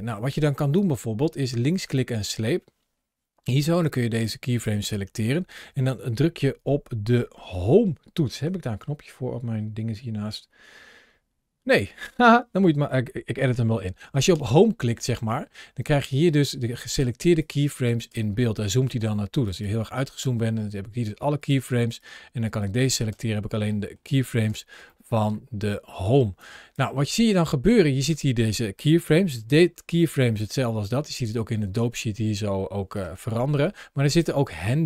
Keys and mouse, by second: 0.7-2.0 drag, 4.2 drag, 14.2 Home, 15.2-16.3 middle drag, 17.4-17.8 drag, 17.9 Home, 19.4 click, 21.3 click, 21.9-22.5 drag, 23.6-25.1 middle drag, 26.3 click, 27.1 click, 28.9 g, 32.8 click, 34.0 click.